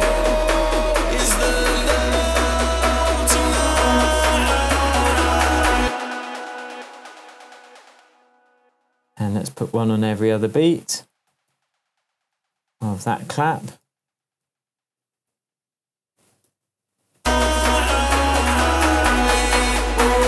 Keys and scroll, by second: 5.8 space, 11.3 super+d, 13.8 super+d, 16.4 BackSpace.